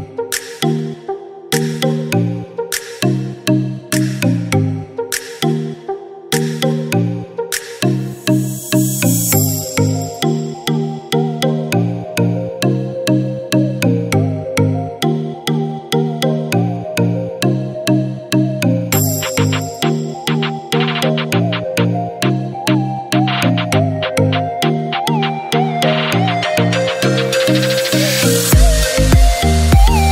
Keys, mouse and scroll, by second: 1.0 typing, 1.8 ctrl+g, 2.5 scroll down 1, 2.7 typing, 3.2 scroll up 1, 3.8 scroll down 1, 6.2 scroll up 1, 6.2 typing, 7.0 scroll up 1, 7.0 click, 7.5 typing, 8.2-10.4 right drag, 8.5 typing, 10.1 typing, 10.4 scroll down 1, 11.5 click, 11.8 scroll down 1, 12.4 click, 12.4 typing, 13.9 ctrl+g, 15.4 click, 17.2-18.0 typing, 18.7 click, 22.1 Caps_Lock, 23.1-24.6 typing, 24.8 ctrl+space, 26.3 click, 27.0 typing.